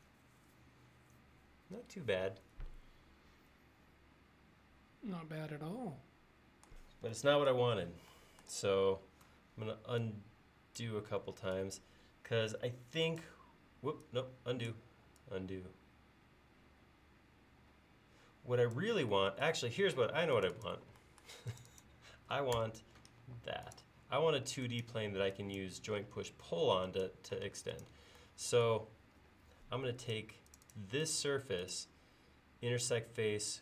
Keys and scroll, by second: 20.1 space, 22.6 BackSpace, 23.3 e, 27.5 space.